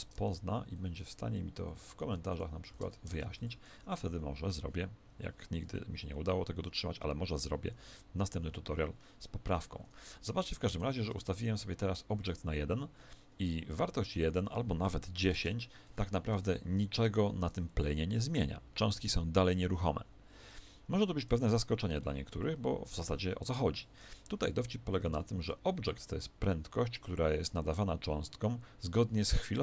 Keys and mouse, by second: 1.2 0, 1.9 0, 5.6 KP_1, 7.8-14.1 middle drag, 9.5 Escape, 14.1 click, 16.3 alt+a, 24.9 click.